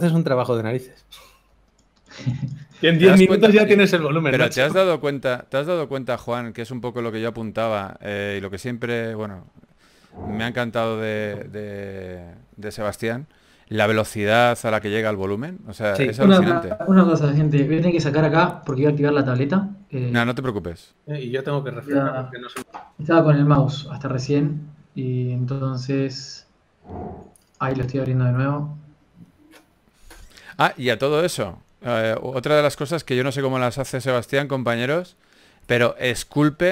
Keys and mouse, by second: 0.1 click, 0.5-1.7 middle drag, 2.4 ctrl+s, 2.8 a, 5.1 a, 5.5 a, 5.6 ctrl+s, 13.9 ctrl+s, 18.3 ctrl+s.